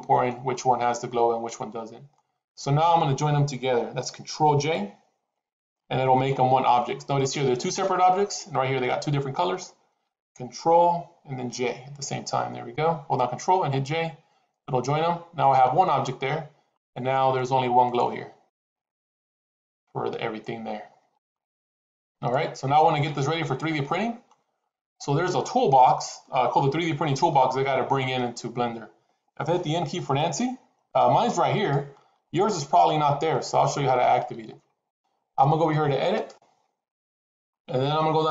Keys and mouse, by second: 1.0-2.1 middle drag, 6.0-6.7 middle drag, 11.4 ctrl+j, 16.6 click, 17.7 click, 18.4 click, 19.1 click, 19.5 click, 20.0-21.6 middle drag, 22.2-24.2 middle drag, 26.6-27.0 shift+middle drag, 27.2-28.1 middle drag, 30.0 n, 31.5 click, 33.4 click, 34.2 n, 36.1-38.3 drag.